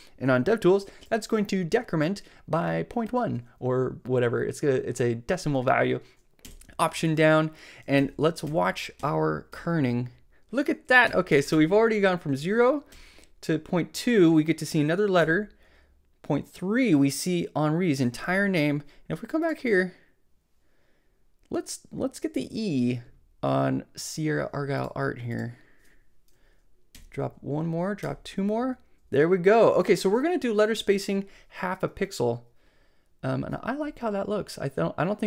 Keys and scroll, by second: 6.4 alt+Down, 8.0 alt+Up, 8.5 alt+Down, 11.1 alt+Up, 12.9 alt+Down, 15.2 alt+Down, 26.9 alt+Down.